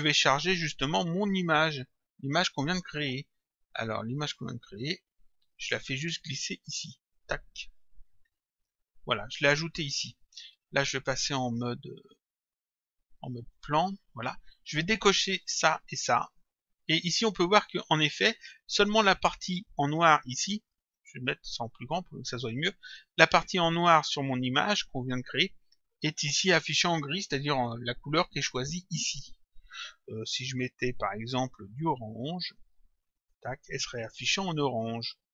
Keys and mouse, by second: 1.7 click, 4.1 click, 8.6 click, 11.1 right click, 13.4 click, 15.3 click, 20.6 right click, 21.8 click, 28.1 click, 30.6 click.